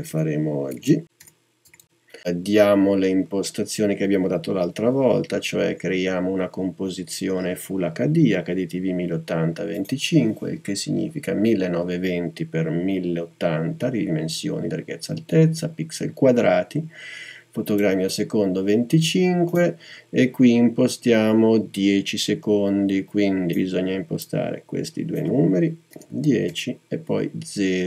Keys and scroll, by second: 0.0-1.7 typing, 26.0-27.8 typing.